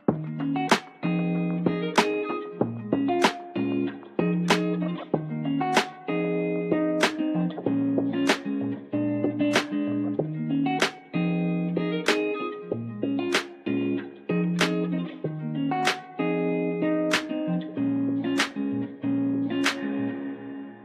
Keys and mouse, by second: 0.5 shift+middle click, 2.3 Tab, 4.3 shift+middle click, 4.7 a, 5.3 middle click, 6.3 shift+space, 11.8 Tab, 12.2-13.6 middle drag, 15.1 shift+middle click, 16.4-20.5 right drag, 20.6 middle click.